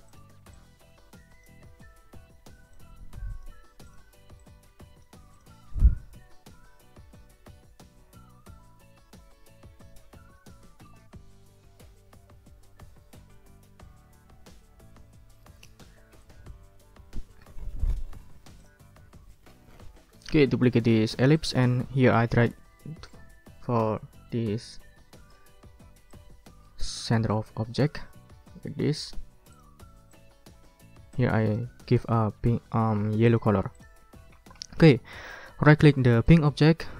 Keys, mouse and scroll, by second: 0.1 ctrl+click, 0.5-1.6 ctrl+drag, 2.7 click, 3.8 shift+click, 5.3 click, 5.7-6.7 drag, 14.9 click, 15.8 ctrl+scroll down 2, 16.5 ctrl+click, 16.7 click, 18.6 click, 19.7 click, 21.0 ctrl+d, 21.3-25.5 ctrl+drag, 25.6 ctrl+scroll up 2, 26.1-27.7 ctrl+drag, 29.5 click, 30.1 click, 31.1 click, 33.3 click, 33.8 click, 34.3 ctrl+scroll down 1, 34.6 ctrl+click, 36.3 click.